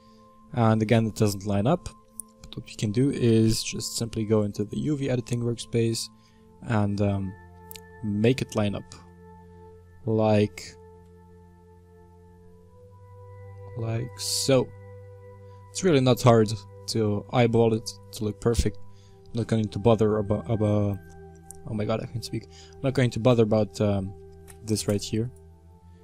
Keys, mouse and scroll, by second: 0.5-4.7 shift+middle drag, 4.7 click, 6.3-7.3 middle drag, 7.3-7.8 scroll up 4, 7.8-9.5 middle drag, 9.5-10.8 scroll up 3, 10.8 s, 14.2 Tab, 15.1-15.5 scroll down 3, 15.5-17.0 middle drag, 17.0 scroll down 1, 17.3-24.9 middle drag, 24.9 x, 25.2 right click.